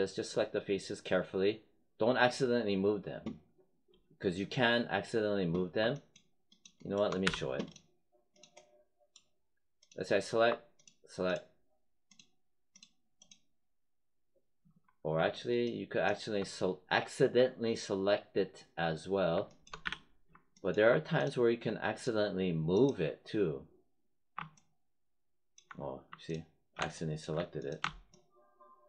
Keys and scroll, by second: 7.2 z, 19.8 z.